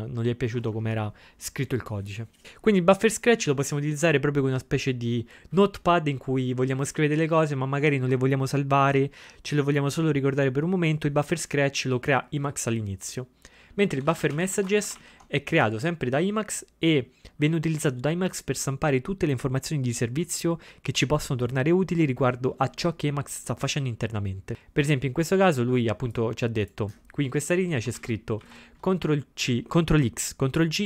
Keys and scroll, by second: 14.1 ctrl+x, 14.1-15.5 typing, 27.9 ctrl+x, 28.4 ctrl+x.